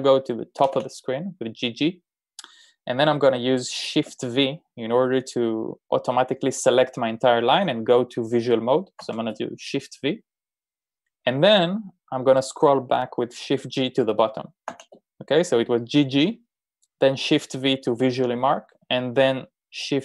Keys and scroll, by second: 0.6-1.3 typing, 9.0 shift+v, 15.0 shift+g.